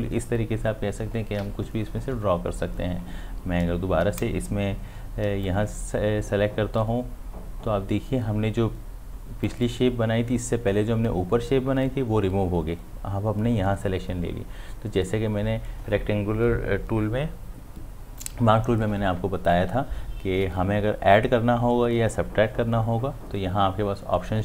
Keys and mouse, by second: 5.4-11.7 drag.